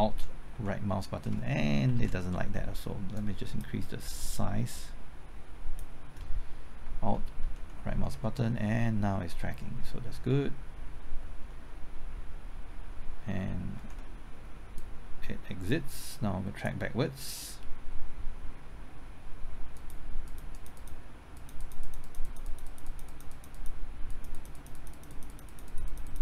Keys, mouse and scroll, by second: 0.5 alt+Right, 2.0 ctrl+z, 3.1-6.1 drag, 6.1 click, 7.5 alt+Right, 8.1 alt+Right, 14.8-26.2 drag.